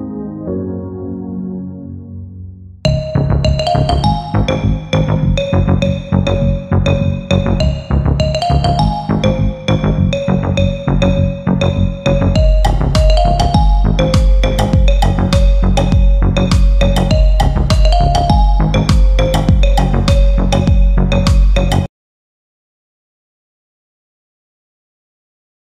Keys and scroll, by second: 2.6 g, 10.6 F3, 11.0 Escape, 11.9 ctrl+g, 14.9 F4, 15.8 F10, 17.1 F9.